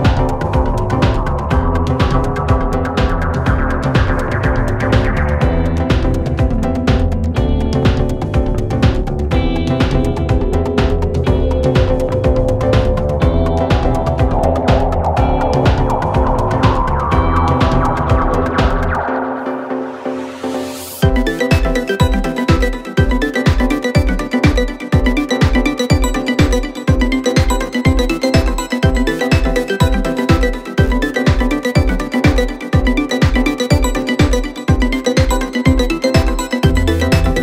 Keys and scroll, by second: 1.3 shift+h, 1.4 shift+a, 1.5 shift+n, 1.7 Return, 5.9 F1, 8.7-9.2 typing, 9.4 Return, 12.7 F1, 13.2 ctrl+d, 13.3 Escape, 22.3 p, 23.0 4, 29.6 ., 35.1 Delete.